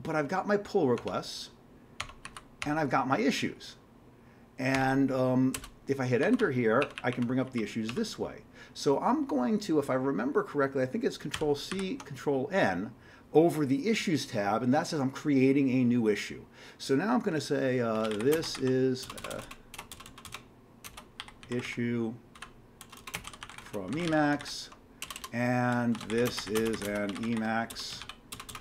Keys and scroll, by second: 1.0 Tab, 2.0 Tab, 2.2 Down, 2.6 Tab, 4.7 Tab, 5.5 Return, 6.2 Down, 6.8 Up, 7.0 Up, 7.5 Down, 7.7-8.4 typing, 11.4 ctrl+c, 11.7 ctrl+n, 17.7-19.9 typing, 21.1-28.6 typing.